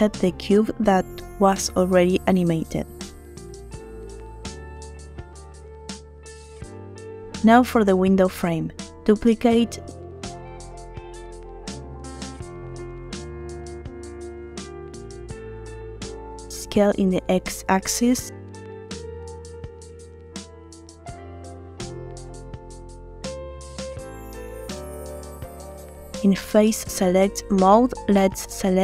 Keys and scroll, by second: 2.1 space, 9.1 shift+d, 10.1 Escape, 16.2 s, 16.5 x, 25.5 Tab, 28.2 3.